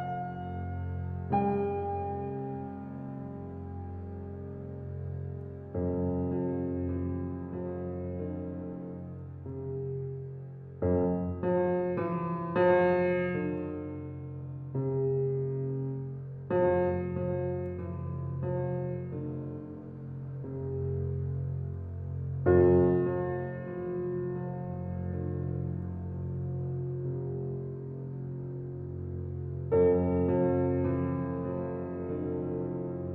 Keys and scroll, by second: 0.3 s, 14.0 space.